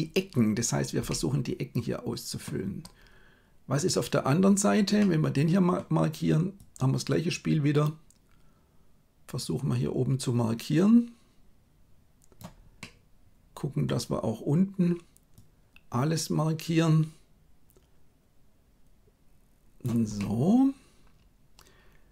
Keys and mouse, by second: 1.0-2.4 middle drag, 4.9 middle click, 6.7-12.4 drag, 12.7-13.8 middle drag, 15.4-19.9 drag, 20.1-22.1 middle drag.